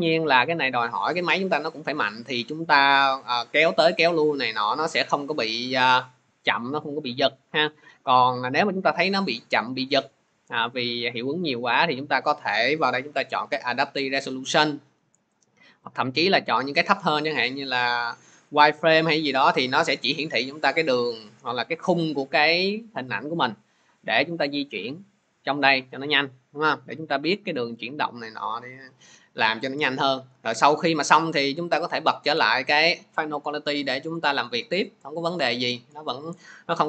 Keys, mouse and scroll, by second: 4.8 click, 9.8 click, 12.0 click, 16.1 click, 18.3 click, 23.9 click, 30.6 click, 31.9 click, 32.5 click.